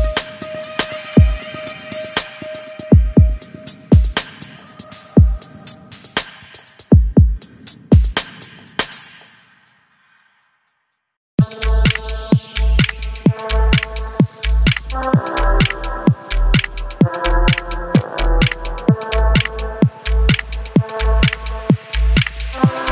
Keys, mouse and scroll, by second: 0.2 middle drag, 0.4 scroll up 1, 0.5 click, 0.6 middle drag, 0.8 shift+click, 0.9-1.3 middle drag, 1.3 v, 1.8 middle click, 2.0 middle click, 2.2 shift+click, 2.4 middle click, 2.5 scroll up 1, 2.6 3, 2.7 shift+click, 2.9 middle click, 3.2 shift+click, 3.3 middle click, 3.4 g, 3.9 KP_3, 4.1 g, 4.8 shift+middle click, 5.0 scroll down 1, 5.1 scroll up 1, 5.2 middle click, 5.5 2, 5.6-5.9 middle drag, 5.9 click, 6.0 middle click, 6.1 3, 6.2 click, 6.2-7.0 middle drag, 7.0 shift+click, 7.0 middle click, 7.1 x, 7.3 middle click, 7.4 2, 7.4-8.0 middle drag, 8.0 click, 8.1-8.5 middle drag, 8.5-11.1 typing, 8.6 scroll up 2, 8.9 middle click, 9.4-9.7 shift+middle drag, 9.8 click, 10.0 drag, 10.3 scroll down 2, 10.3 middle click, 10.6 middle click, 10.8 click, 10.8 middle drag, 11.3 drag, 11.4-12.1 shift+middle drag, 12.1 k, 12.5 middle drag, 12.7 scroll up 2, 12.7-13.1 middle drag, 13.1 k, 13.7 scroll down 1, 13.7 middle click, 14.5 scroll up 2, 14.6 shift+middle click, 15.0 scroll down 2, 15.1 middle click, 15.5 scroll down 2, 15.6-16.1 middle drag, 16.1 click, 16.1 middle drag, 16.4 f, 16.5 middle click, 16.6 a, 16.7 click, 16.7 middle drag, 17.1 middle click, 17.3 ctrl+r, 17.6 middle click, 17.7 drag, 18.0 middle drag, 18.1 f, 18.2 shift+drag, 18.5 shift+drag, 18.6 f, 18.6 click, 18.9 middle click, 18.9 scroll down 1, 19.0 middle drag, 19.1 scroll up 3, 19.2 middle click, 19.4 middle drag, 19.6 shift+click, 19.6-22.3 typing, 19.7 middle drag, 20.0 shift+click, 20.1 middle click, 20.5 middle drag, 20.7 shift+drag, 21.1 shift+drag, 21.2 click, 21.5-21.9 middle drag, 21.9 Tab, 22.0 middle drag, 22.4 Tab, 22.5 middle click.